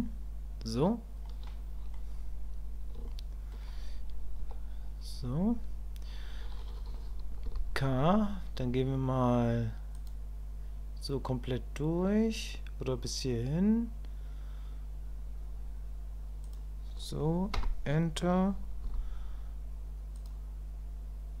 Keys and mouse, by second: 1.2 middle click, 3.1 shift+click, 4.4 KP_1, 7.5 k.